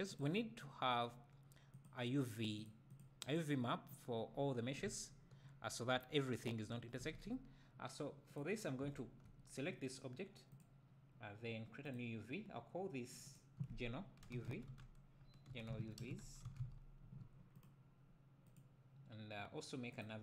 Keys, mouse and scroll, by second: 0.2 click, 3.0 click, 4.4-4.9 scroll up 1, 4.9 a, 7.2 Tab, 7.5-8.3 scroll down 1, 8.4 click, 8.8 `, 12.0-13.2 drag, 17.1-18.0 drag, 20.0-20.2 drag.